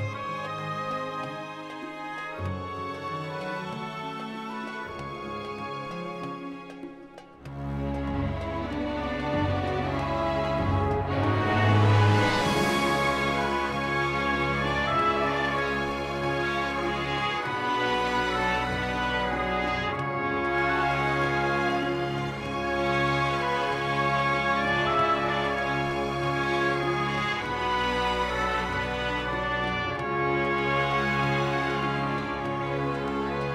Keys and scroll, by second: 5.7 i, 5.8 m, 6.1 g, 6.3 1, 6.5 Return, 11.3 ctrl+t, 12.9 g, 30.0 r, 30.5 y, 30.6 9, 31.2 Return, 31.7 s, 32.1 x, 33.0 s, 33.2 y.